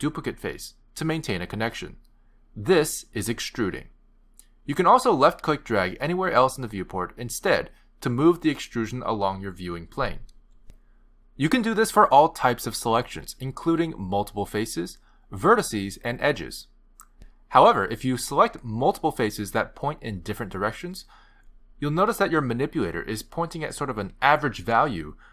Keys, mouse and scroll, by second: 0.3 middle click, 7.4 click, 12.5 middle click, 14.1 click, 15.0 shift+click, 15.8 click, 16.5 middle click, 22.7 middle click, 24.4 middle click.